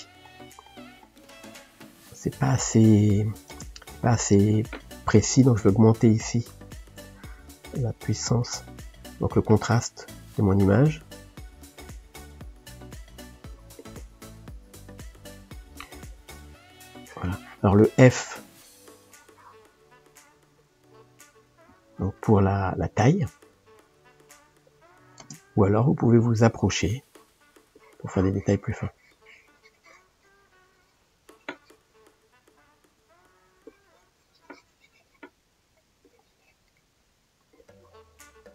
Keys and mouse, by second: 3.6 ctrl+space, 6.9-9.6 drag, 11.6-12.8 drag, 12.8 middle click, 13.5 click, 14.4 middle click, 15.0 f, 16.0-17.7 drag, 17.7 shift+middle click, 18.5-19.8 drag, 19.8 middle click, 20.5 click, 21.3-22.4 middle drag, 22.4 click, 23.2-25.3 shift+middle drag, 25.3 ctrl+space, 25.9-27.1 ctrl+middle drag, 27.1-30.8 drag, 32.3-33.6 middle drag, 33.6-35.4 drag, 35.4 ctrl+middle click, 36.0 click, 36.7 middle click, 37.5-38.5 drag.